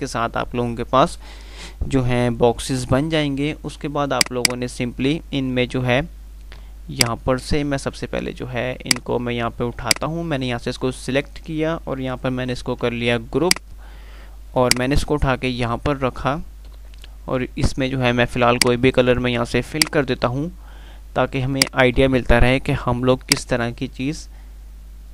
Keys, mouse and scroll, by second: 4.4 click, 5.1 F3, 7.2 click, 7.4 F2, 9.1-11.0 drag, 17.0 shift+Page_Up, 18.5 click, 19.0 F3, 21.8 click, 22.2 F3, 23.0 F2, 24.6-25.1 drag.